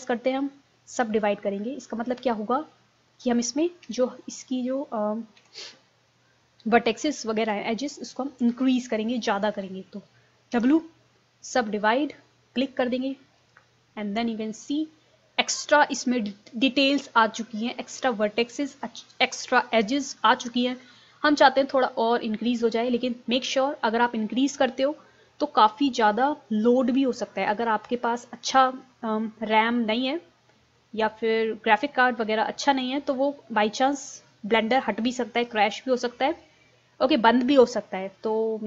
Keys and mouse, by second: 3.9 z, 5.4 a, 10.6 w.